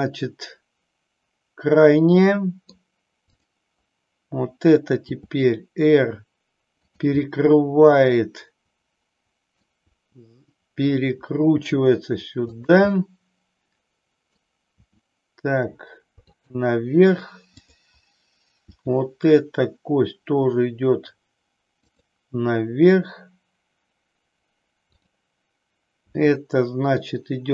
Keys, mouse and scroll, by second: 2.3 middle click, 3.5 click, 4.9 r, 7.3-9.8 middle drag, 9.9 r, 13.1-14.4 middle drag, 14.8 r, 16.4 click, 17.4 click, 18.8 r, 22.1 click, 25.0-25.7 drag, 26.2 r.